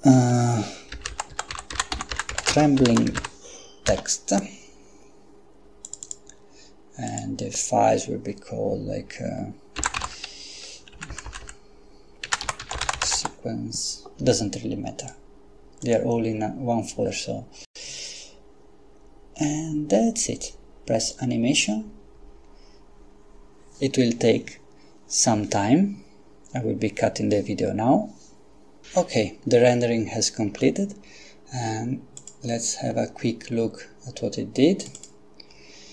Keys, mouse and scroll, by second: 0.9-3.1 typing, 3.9 Return, 5.9 click, 7.1 click, 9.8-13.2 typing, 15.0 click, 15.8 click, 21.0 click, 30.5 Escape, 32.2 click, 34.9 click.